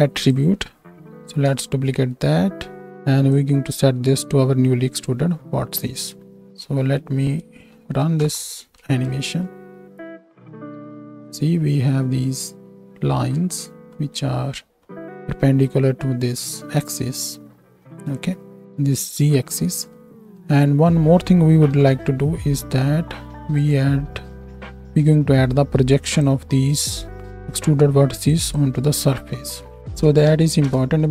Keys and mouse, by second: 1.2 shift+d, 2.8 click, 6.5 ctrl+space, 8.0 shift+Right, 8.2 shift+Left, 9.1 space, 10.5 KP_7, 13.2 space, 21.7 KP_7.